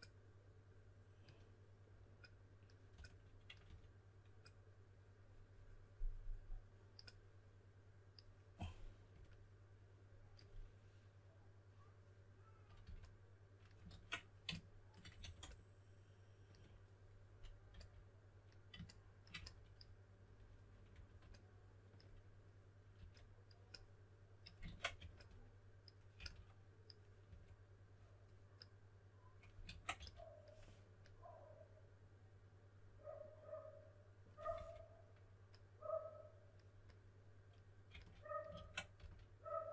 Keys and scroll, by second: 2.9-3.6 typing, 12.8 2, 13.9 super+z, 15.2 4, 17.7 s, 19.3 s, 20.6-21.4 typing, 22.9 2, 24.6 super+z, 24.9-27.2 typing, 29.6 super+z, 29.9 s, 34.3-35.0 typing, 37.9 typing, 38.5 super+z, 38.9 s.